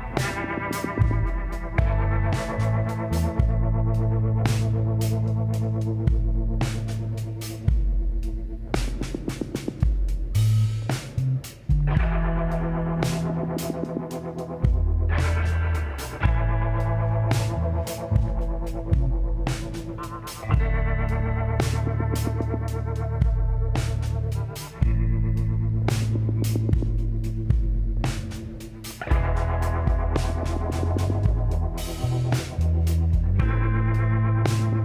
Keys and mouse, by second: 2.5 click, 4.0 click, 4.2 middle click, 4.6 click, 4.8-6.4 middle drag, 6.4-8.3 drag, 9.3 middle click, 9.9-12.9 middle drag, 14.5-18.4 drag, 15.3-17.3 middle drag, 17.3 ctrl+KP_Add, 18.0 middle click, 19.2 KP_Decimal, 22.9-27.6 drag, 26.8 KP_1, 28.2 shift+d, 32.5 s.